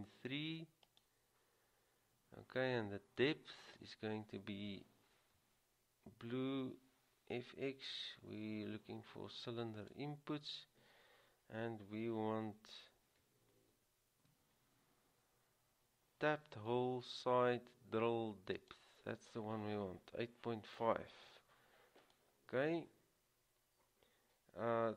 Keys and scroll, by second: 6.6 c, 14.4 t.